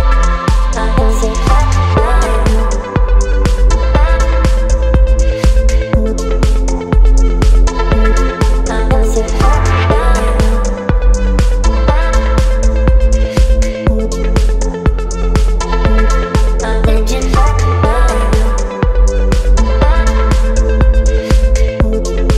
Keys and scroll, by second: 1.1 space, 6.5 Delete, 6.9 space, 11.8 Delete, 12.9 space, 13.8 v.